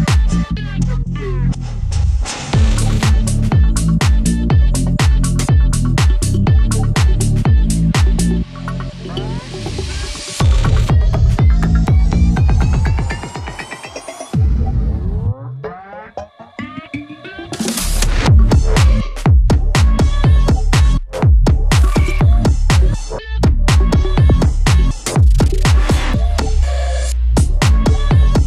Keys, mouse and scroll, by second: 0.5 click, 3.9 click, 5.6 click, 7.4-9.9 drag, 9.9-13.9 drag, 18.9-28.4 drag.